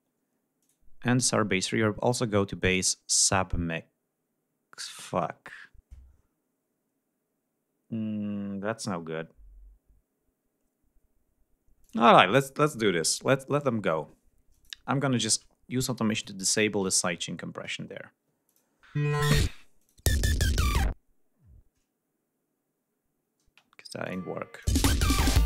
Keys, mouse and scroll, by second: 0.7 click, 11.8 click, 13.7-14.1 scroll up 2, 14.6 click, 16.2 click, 18.5 click, 19.0 space, 19.8 click, 21.3 scroll down 2, 23.5 space, 24.1 click, 24.6 click, 24.8 space.